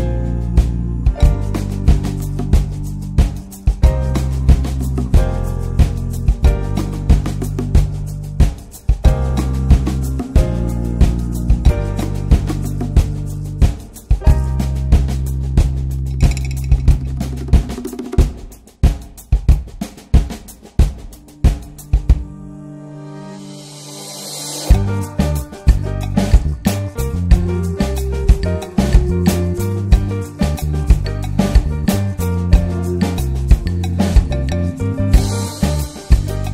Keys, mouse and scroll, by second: 0.6 scroll down 4, 0.8-1.9 middle drag, 1.9 scroll up 1, 2.2-3.4 middle drag, 3.4-4.7 drag, 6.3 click, 6.4 scroll down 3, 6.7-7.0 middle drag, 7.0 scroll up 1, 7.2 click, 7.7 scroll down 1, 7.8-9.5 middle drag, 9.5-12.1 drag, 12.1-12.8 middle drag, 12.8 scroll up 1, 12.9-14.0 middle drag, 14.0 click, 15.0-17.2 drag, 19.5 click, 24.9-26.7 drag, 26.7 middle click, 26.8 scroll up 1, 27.1-27.5 middle drag, 27.5 scroll down 2, 27.6-28.1 middle drag, 28.1-29.2 scroll up 4, 28.3 shift+middle click, 29.2-29.5 scroll up 1, 29.5 click, 30.0 scroll down 1, 30.1 middle click, 30.4-31.2 scroll up 6, 31.2 click, 32.5 middle click, 32.8 ctrl+s, 33.1 middle click, 33.3 scroll up 1, 33.5 ctrl+s, 34.0 click, 35.7-36.5 drag.